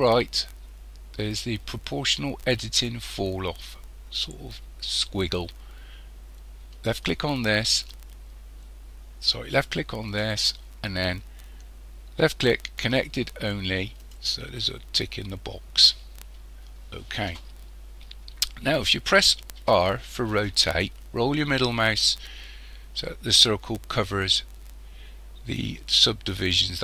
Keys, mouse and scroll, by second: 6.9 click, 10.1 click, 19.6 r.